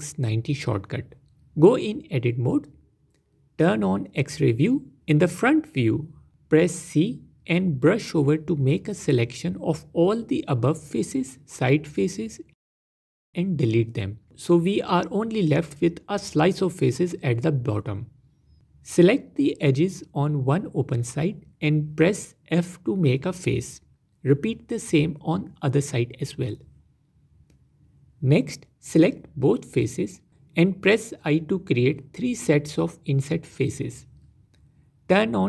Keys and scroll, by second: 3.0 Tab, 4.1 z, 6.0 c, 14.8-15.3 typing, 16.6 z, 18.6 Tab, 22.9 f, 26.4 Tab, 30.0 i, 32.8 i, 33.9 i, 35.3 Tab.